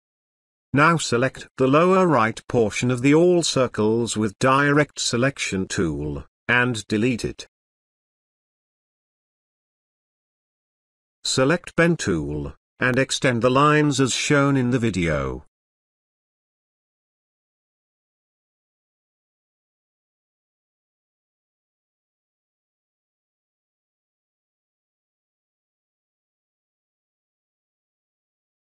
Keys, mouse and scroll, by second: 1.5-1.9 click, 2.8 Delete, 4.4 click, 5.7 ctrl+space, 6.0 ctrl+click, 6.2 ctrl+space, 6.4-7.0 click, 6.8 space, 10.9-12.2 drag, 19.2 shift+click, 23.2 Escape, 25.2 click, 27.9 shift+click.